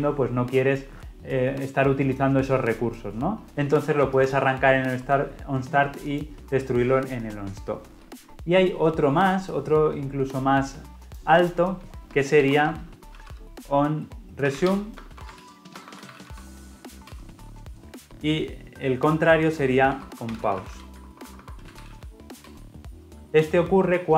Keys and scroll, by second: 17.0 Return, 22.4 Return.